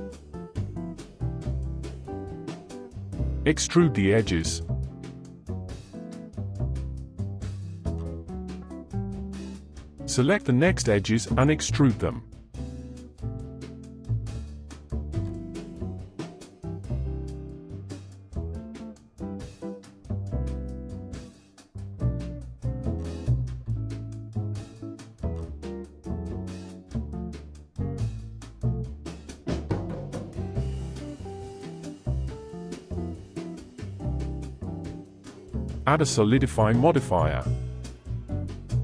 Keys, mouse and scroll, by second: 3.0 KP_1, 3.0-4.1 shift+middle drag, 4.1 e, 7.1-8.5 middle drag, 8.7 click, 9.6 shift+click, 11.4 KP_3, 13.3-14.3 scroll down 1, 14.3 e, 18.6 g, 20.2-23.1 middle drag, 23.8 ctrl+s, 24.8-27.0 middle drag, 27.0 Tab, 27.6-30.2 middle drag, 30.2-30.7 scroll up 5, 30.7-31.3 scroll down 6, 31.4-34.4 middle drag, 34.7 click, 36.2-38.8 drag.